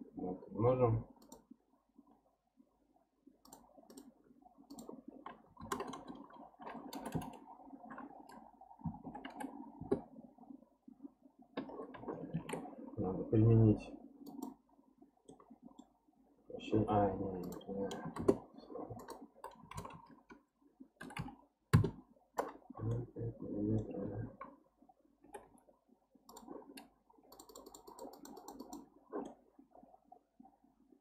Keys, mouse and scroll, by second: 3.4 click, 3.9-5.9 drag, 5.9 KP_0, 7.1 BackSpace, 9.3 m, 12.3 ctrl+a, 15.2 scroll up 1, 15.3-17.4 middle drag, 17.4-21.2 drag, 21.2 m, 22.9-25.2 middle drag, 25.2 g, 27.3-29.2 drag, 29.2-31.0 middle drag.